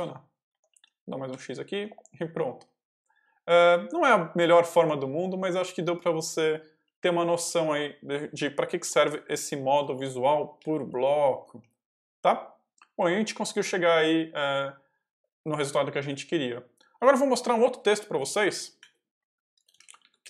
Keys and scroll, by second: 0.4 Escape, 0.6-2.5 typing, 6.7 k, 8.0 |, 9.3 ctrl+v, 9.7 ctrl+y, 9.9 ctrl+j, 10.5 j, 11.2 Escape, 11.5 k.